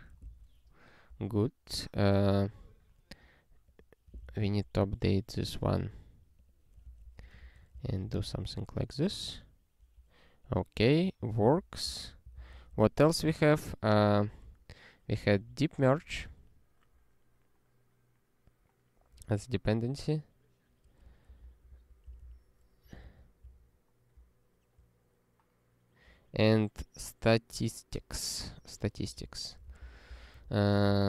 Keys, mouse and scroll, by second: 0.3 ctrl+s, 1.3 scroll up 1, 3.6 click, 4.4 ctrl+e, 4.8 scroll down 1, 6.3 click, 6.8 ctrl+f, 7.0 space, 7.2 ', 7.4 (, 7.8 ctrl+s, 8.0 ctrl+e, 10.4 click, 11.3 ctrl+n, 11.4 ctrl+a, 11.8 ctrl+k, 11.9 ctrl+/, 12.2 ctrl+n, 12.3 Return, 12.6 ctrl+p, 12.7 ctrl+y, 14.4 q, 28.4 super+o, 29.0 ctrl+p, 29.7 alt+b, 29.8 alt+b, 30.1 alt+b, 30.3 alt+d, 30.7 alt+d, 30.8-31.0 typing.